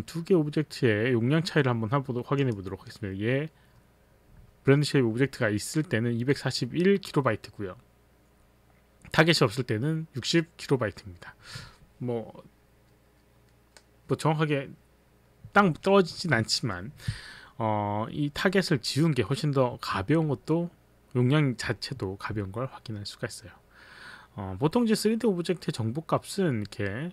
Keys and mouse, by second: 2.4 click.